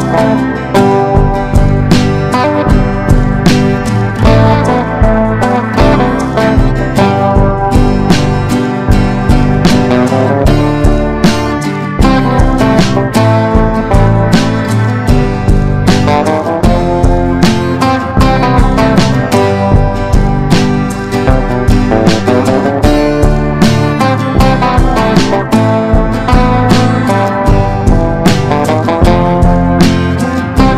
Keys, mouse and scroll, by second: 4.6 ctrl+d, 4.9-7.7 drag, 9.1 click, 9.6 shift+click, 10.4 click, 12.5 ctrl+d, 13.0-17.2 drag, 18.1 Right, 20.2 Left, 21.8 click, 23.1 ctrl+d, 23.4-26.1 drag, 26.3 shift+click, 27.0 click, 29.0 Right, 29.2 Right, 30.4 click.